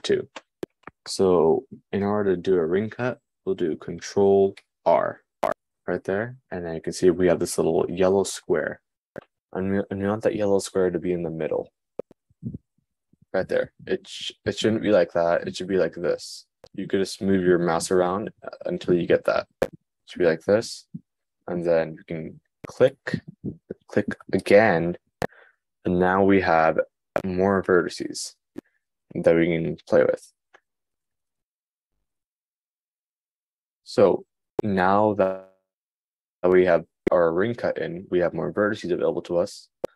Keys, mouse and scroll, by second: 4.8 super+r.